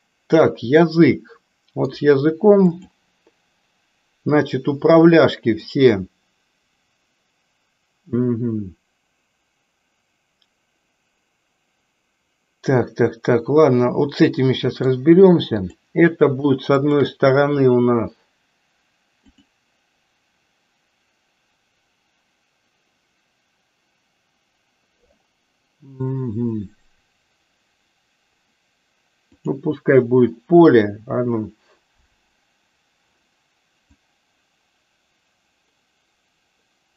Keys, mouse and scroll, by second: 0.8-2.0 middle drag, 2.7 click, 5.7-15.0 middle drag, 15.5 click, 16.7 shift+click, 19.2-29.8 drag, 30.9 click, 33.9-36.9 drag.